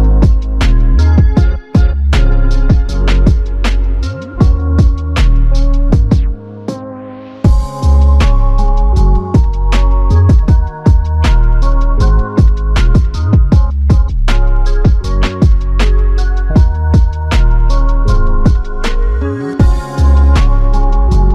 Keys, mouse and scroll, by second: 5.0 double click, 7.1 alt+click, 11.4 double click, 13.1 alt+click, 14.4 alt+click, 16.1 double click, 17.4 alt+click, 19.2 double click.